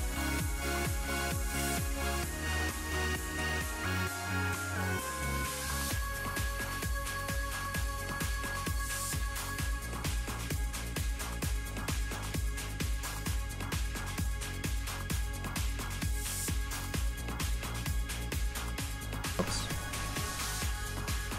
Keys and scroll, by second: 19.2 z.